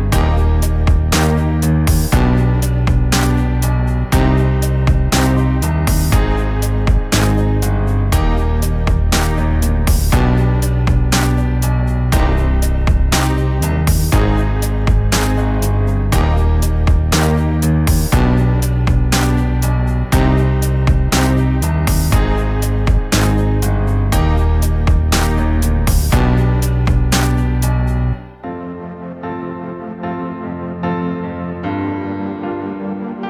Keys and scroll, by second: 31.0 v.